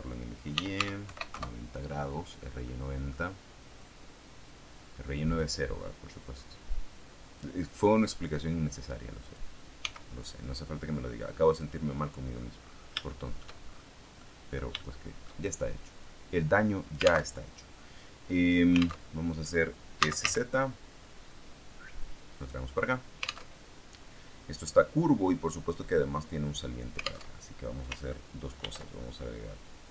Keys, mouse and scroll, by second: 0.2-1.5 typing, 2.6 middle click, 3.7-5.5 drag, 6.4-7.5 drag, 8.0-9.4 drag, 9.7 s, 11.4 click, 11.9 middle click, 12.5-13.0 scroll up 1, 13.0 shift+middle click, 14.1 middle click, 14.7 shift+middle click, 15.9-17.2 drag, 17.2 alt+Tab, 19.0 alt+Tab, 19.9 z, 22.3 click, 23.4 alt+Tab, 27.2 alt+Tab, 28.5 ctrl+r.